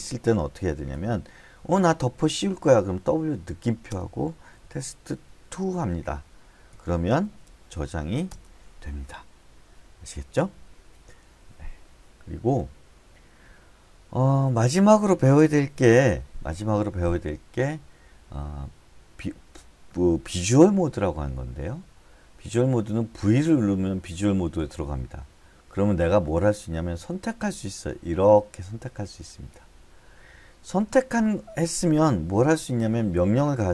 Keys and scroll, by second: 1.4-8.4 typing, 8.8 Return, 23.6 v.